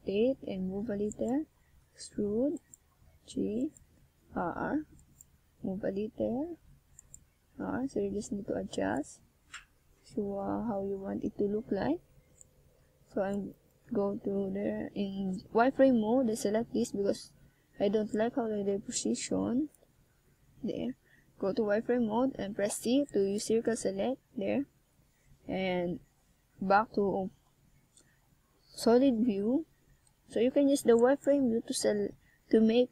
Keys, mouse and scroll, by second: 0.4 click, 1.1 click, 4.3 click, 6.4 click, 7.8 click, 8.2 click, 10.0 click, 11.1-11.6 scroll up 2, 13.1 ctrl+scroll down 1, 13.6 shift+scroll up 1, 14.9 shift+a, 23.1 click, 25.7 scroll down 1, 27.6 click, 30.0 middle click, 31.6 KP_1.